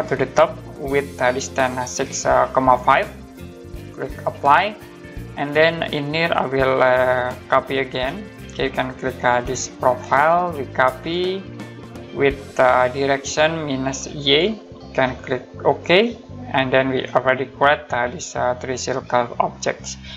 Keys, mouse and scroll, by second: 4.2 click, 9.0 click, 13.0 click.